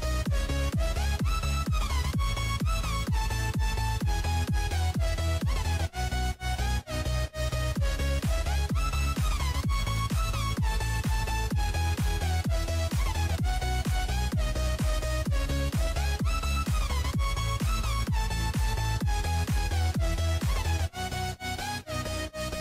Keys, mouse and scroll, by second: 1.2 click, 2.7 click, 19.5 click, 21.2 click.